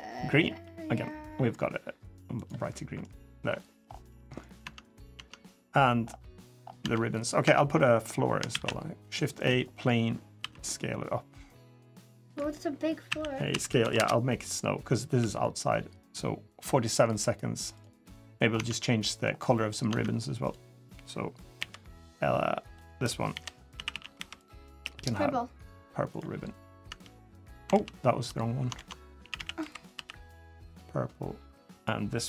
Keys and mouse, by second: 2.5 middle click, 3.3 middle click, 4.0 middle click, 4.4 Tab, 4.7 drag, 4.9 Tab, 4.9 middle click, 6.1 middle click, 6.6 Tab, 6.9 middle click, 7.2 Tab, 8.3 shift+a, 10.2 s, 12.9 a, 13.3 s, 15.0 g, 17.9 click, 18.3 Tab, 18.8 click, 19.3 middle drag, 19.7 Tab, 21.4 l, 23.1-24.6 typing, 26.6 Tab, 27.5 ctrl+z, 28.5 ctrl+z, 29.0 a, 29.1 a, 29.4 b, 29.7 g, 31.5 click.